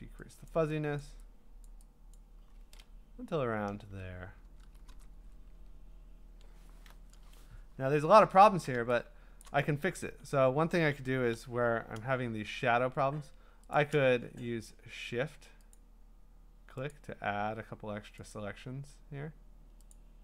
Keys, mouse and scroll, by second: 0.5 click, 1.0 click, 2.1 click, 3.7 Return, 5.2-5.7 scroll, 5.7 scroll down 4, 6.0 scroll down 5, 7.8-8.4 scroll up 12, 8.5 scroll, 9.4 click, 13.7 shift+click, 15.7 click, 16.9 click, 18.4 click.